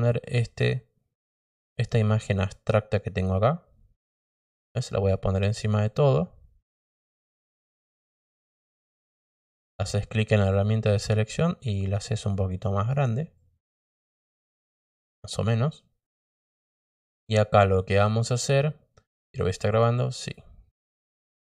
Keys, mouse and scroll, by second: 0.2 click, 4.1-5.7 drag, 9.7 click, 12.3 click, 13.3 click, 14.3 click, 19.2 click, 20.0 click.